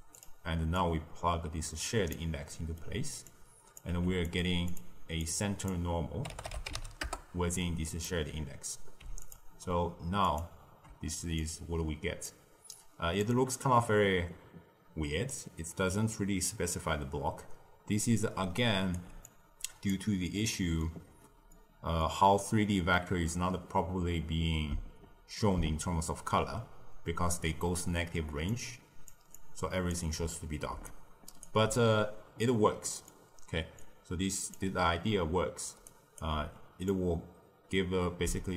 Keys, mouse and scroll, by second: 2.4-3.2 middle drag, 3.2 drag, 3.9 g, 4.6 click, 5.2 click, 8.4-9.2 scroll down 1, 9.2 ctrl+shift+click, 10.2 ctrl+shift+click, 11.4 click, 12.7 click, 18.3 d, 18.5 right click, 18.9 d, 19.2 click, 20.3-24.5 middle drag, 28.2-31.4 typing, 28.4 click, 29.3 click, 30.8 right click, 32.8 middle click, 33.2-33.7 scroll down 4, 33.7 click, 35.7 d, 35.8 right click, 36.2 d, 36.8 click.